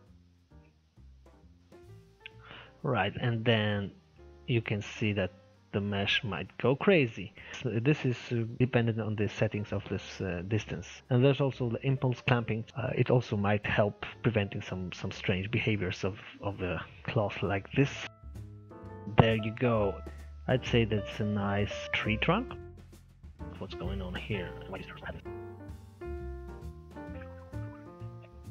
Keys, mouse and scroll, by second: 1.0-18.0 drag, 19.3-19.6 scroll down 1, 19.9-22.2 middle drag, 23.7 scroll up 4, 23.9-25.2 middle drag, 26.1-28.5 drag.